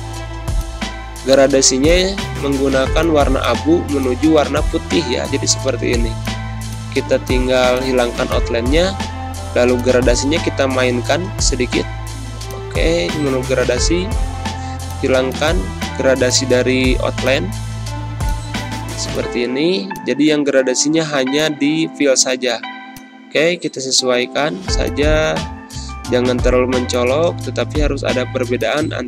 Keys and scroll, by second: 7.5 space.